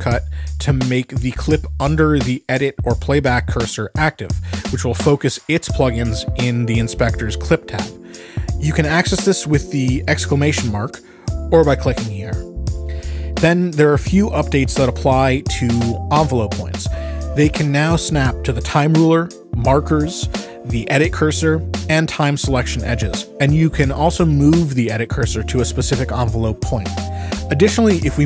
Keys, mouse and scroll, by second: 1.4 shift+1, 4.1 click, 4.8 shift+1, 10.2 click, 11.1 shift+1, 12.0 click, 18.4 click, 20.3-23.5 drag, 24.8 right click, 26.3 click, 27.1 click.